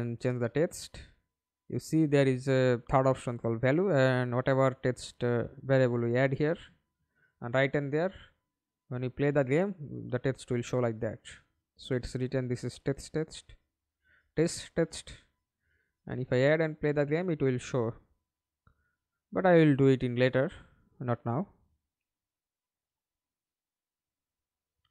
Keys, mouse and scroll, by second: 1.0 right click, 2.1 double click, 2.9 right click, 3.6-5.6 typing, 11.2 double click, 16.7 right click, 22.1 Delete, 23.4 double click, 24.4 middle click.